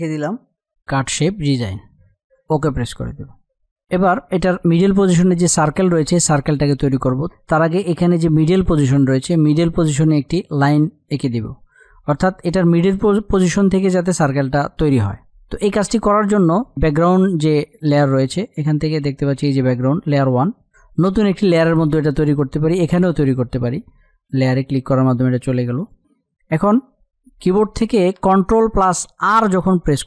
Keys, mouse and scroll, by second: 0.0-1.8 typing, 1.7 click, 3.2 click, 15.2 click, 23.8 click.